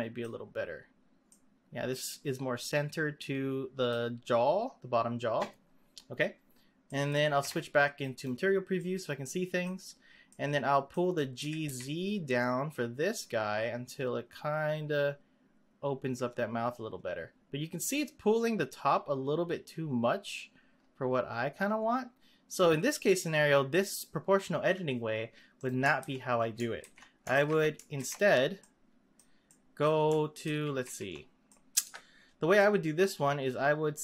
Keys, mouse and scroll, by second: 0.4-1.3 scroll down 6, 1.3-4.3 middle drag, 6.0-6.8 scroll down 1, 6.8 middle click, 7.3 z, 8.7-9.9 middle drag, 9.9-10.3 scroll down 2, 10.3-11.4 middle drag, 11.4 g, 26.0 ctrl+x, 26.8 ctrl+z, 27.3 ctrl+z, 28.0 ctrl+z, 28.6-30.4 middle drag, 30.4 ctrl+z, 30.8 ctrl+z, 31.5 middle click, 31.8 Tab, 32.5-33.7 middle drag, 33.7-34.0 scroll up 2.